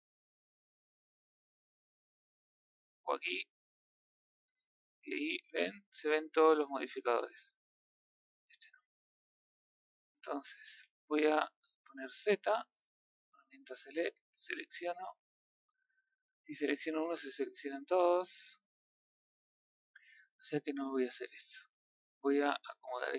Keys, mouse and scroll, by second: 3.7 click, 4.6 click, 6.9 click, 8.3 click, 8.7 middle click, 9.2 scroll up 2, 9.7 middle click, 10.6 a, 12.1 z, 13.2 click, 14.4 click, 17.8-20.0 middle drag, 20.0 z, 20.4-22.0 middle drag.